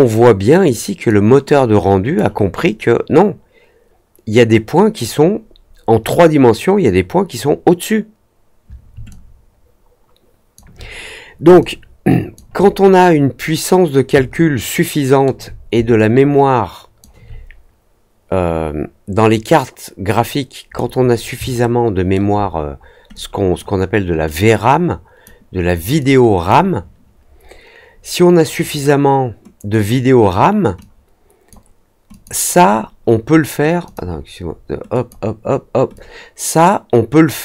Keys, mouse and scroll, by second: 0.6 click, 1.5 click, 9.0-10.5 alt+drag, 11.9 alt+click, 12.8 middle click, 13.5 middle click, 14.3-15.2 alt+middle drag, 15.9-16.9 alt+drag, 19.2-20.7 drag, 21.5 alt+middle click, 23.1 click, 24.2 click, 25.9 click, 27.4 middle click, 27.9 middle click, 29.6 click, 30.7 click, 32.0 click, 33.8 click, 34.9 click, 35.9-37.4 drag.